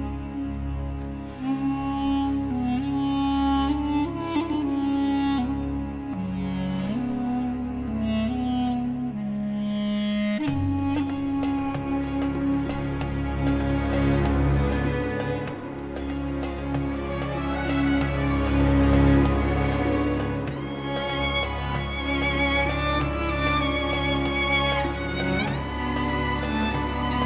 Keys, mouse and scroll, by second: 0.1-1.6 drag, 2.2 click, 3.8 scroll up 1, 6.7 click, 7.3-8.9 drag, 9.4-12.0 drag, 12.5-14.8 drag, 15.4-16.7 drag, 17.1-17.5 scroll up 1, 17.8 scroll down 2, 18.7-20.1 drag, 20.4-20.8 scroll up 2, 21.7-22.2 scroll down 2, 23.6 click, 24.0 click, 24.3-27.2 drag.